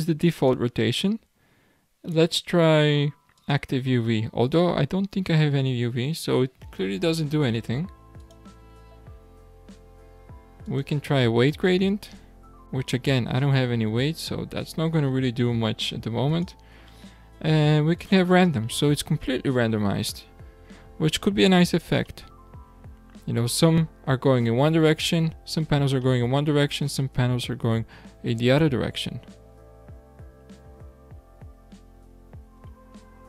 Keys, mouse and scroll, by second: 0.3-3.4 drag, 8.2-12.3 drag, 13.6-16.3 scroll down 1, 16.3-19.3 drag, 20.2-20.8 scroll down 4, 20.8-21.6 scroll up 5, 22.1-23.0 shift+middle drag, 23.0 scroll up 3, 25.1-25.9 scroll down 7, 26.1-29.0 middle drag, 33.1 middle click, 33.1-33.2 scroll up 6.